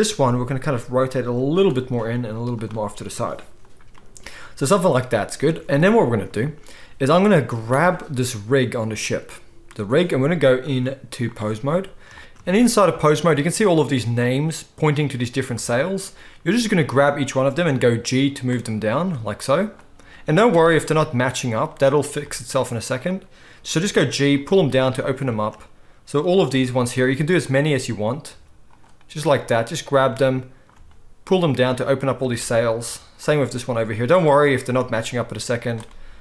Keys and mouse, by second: 0.5 r, 2.1 g, 5.5 ctrl+s, 7.6 click, 7.8-10.6 middle drag, 10.6-12.2 drag, 12.2 ctrl+z, 12.2-17.2 shift+middle drag, 17.2 click, 17.2-18.8 middle drag, 17.8 g, 18.8 click, 19.0-23.2 middle drag, 19.1 g, 23.2 click, 23.3-27.4 middle drag, 23.8 g, 26.5 g, 27.4 click, 27.6-29.9 middle drag, 28.4 g, 29.9 click, 29.9-32.0 middle drag, 30.8 g, 32.0 click, 32.2-35.7 middle drag, 32.9 g, 35.7 drag, 35.7-36.2 middle drag.